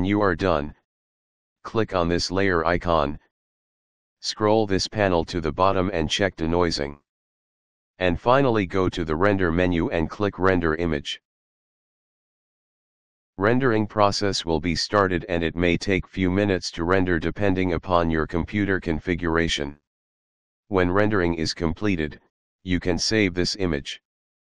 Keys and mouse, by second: 0.2 middle click, 3.3 click, 6.6 click, 10.9 click, 12.1 click.